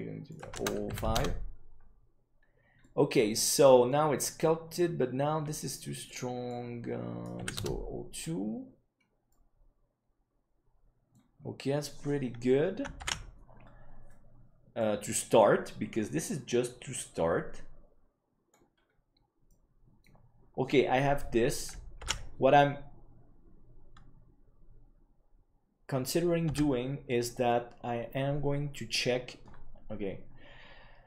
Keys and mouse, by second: 0.4-1.7 drag, 2.7-3.8 middle drag, 6.1-8.1 right drag, 9.2-11.1 middle drag, 11.9-12.4 middle drag, 13.3 ctrl+s, 14.0-14.7 middle drag, 15.4-18.5 middle drag, 19.4-20.0 middle drag, 22.4 ctrl+s, 29.2 Tab.